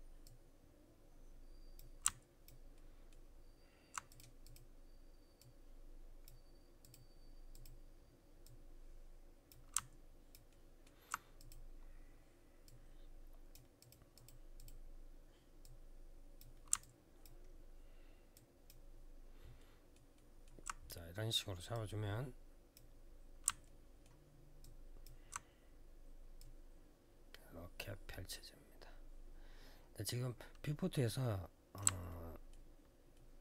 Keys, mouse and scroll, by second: 0.0 click, 2.5 alt+middle click, 3.0 alt+scroll up 1, 3.8 click, 4.2 click, 4.3 double click, 5.1 double click, 6.6 click, 6.7 click, 7.3 click, 7.4 click, 8.2 click, 10.3 alt+middle click, 11.1 click, 12.4 click, 13.6 click, 13.9 click, 14.0 double click, 14.3 click, 14.4 click, 15.4 double click, 16.6 alt+click, 17.2 alt+scroll down 1, 18.1 alt+click, 18.6-19.3 alt+scroll down 1, 19.3 alt+middle click, 19.9 alt+middle click, 21.5 click, 22.8 scroll down 3, 23.4 alt+middle click, 24.0 alt+scroll down 1, 24.4 alt+click, 26.1 click, 31.8 alt+middle click, 32.9 alt+middle click.